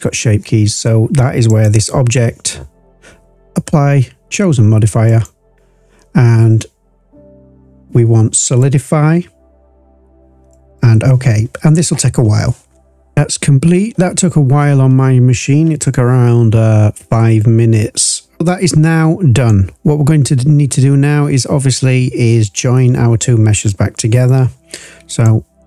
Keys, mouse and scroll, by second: 1.4 click, 13.1 scroll down 2, 13.2-14.6 scroll up 2, 14.6-15.8 scroll up 1, 18.4 scroll down 1, 18.4-19.4 drag, 25.0 click.